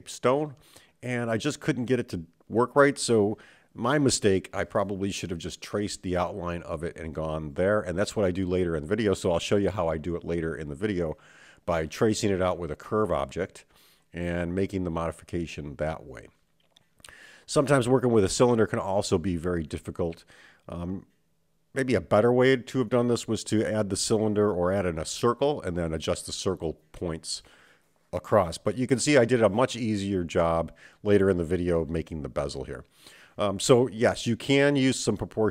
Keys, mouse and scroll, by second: 2.5-12.1 drag, 13.7 click, 14.7-15.8 middle drag, 15.9 click, 17.0 click, 17.9-19.7 drag, 20.0-21.1 middle drag, 22.0 middle click, 23.1 KP_7, 27.0-28.8 middle drag, 29.5 click, 31.3 shift+click, 32.1-33.4 middle drag, 34.0 click, 35.1 shift+click.